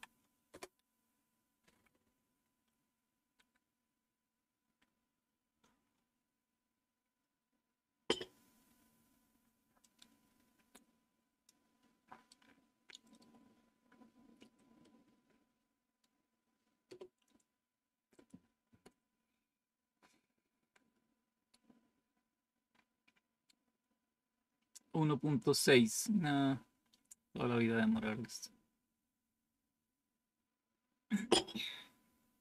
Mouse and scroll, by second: 9.7-11.4 drag, 12.3 right click, 14.7-16.0 right drag, 22.6 scroll up 2, 26.4-27.5 scroll down 2, 28.7-29.6 scroll down 1.